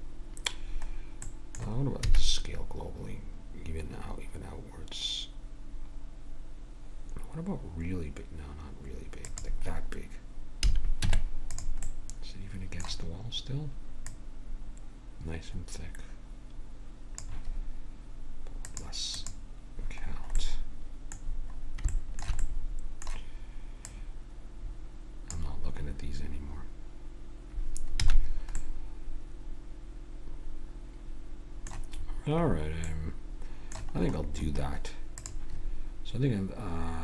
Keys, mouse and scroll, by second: 2.0 s, 10.7 a, 11.1 Tab, 11.8-13.8 middle drag, 14.1-15.9 drag, 18.7-20.6 drag, 20.6 middle click, 23.9-25.3 middle drag, 25.3-28.0 drag, 28.0 a, 28.6-30.2 middle drag, 32.0-33.5 middle drag, 35.2-37.0 drag.